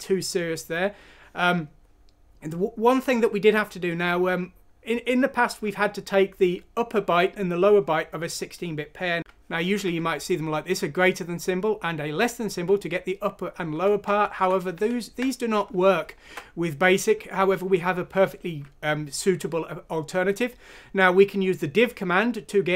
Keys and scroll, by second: 9.2 typing, 14.3 ctrl+z, 14.7 ctrl+z, 16.3 alt+Tab.